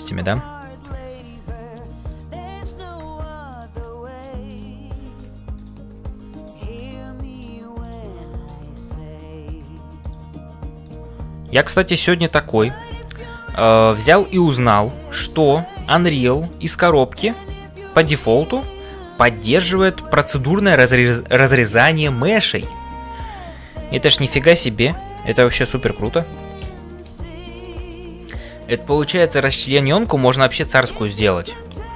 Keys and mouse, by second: 0.0-31.9 typing, 2.4 middle click, 3.9 middle click, 4.4 click, 6.7 middle click, 8.3 click, 13.7 click, 14.1 middle click, 17.1 click, 19.0 click, 23.1 middle click, 24.5 ctrl+l.